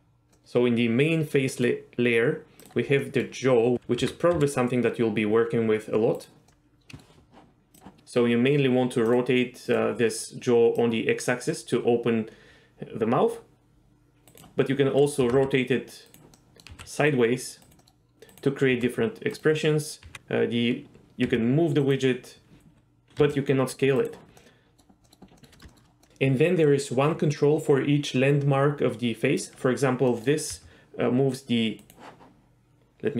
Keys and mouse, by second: 0.4-1.6 middle drag, 2.6 click, 3.1 middle click, 3.7 r, 3.7 x, 4.0 r, 4.3 x, 6.5-7.0 middle drag, 7.7 click, 9.1-9.9 drag, 10.9-14.4 drag, 14.3 middle click, 14.3 right click, 15.2 r, 15.4 r, 16.1 right click, 16.3 middle click, 16.9 r, 17.7 right click, 17.8 middle click, 18.1 r, 18.3 click, 18.7 r, 19.6 middle click, 20.0 g, 21.3 g, 21.8 right click, 22.6 s, 23.2 s, 24.0 right click, 24.4-24.8 middle drag, 25.0 middle click, 25.4 middle click, 25.5 middle click, 25.7 shift+middle drag, 26.0 middle click, 29.4 click, 30.1 middle click, 30.5 g, 31.8 right click.